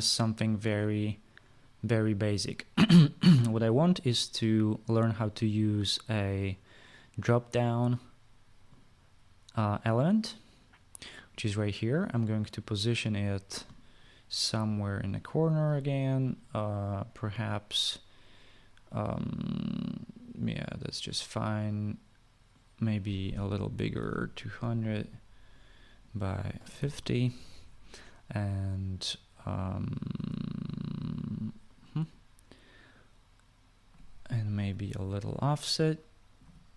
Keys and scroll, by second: 24.3-25.3 typing, 27.1-27.9 typing, 35.4 typing.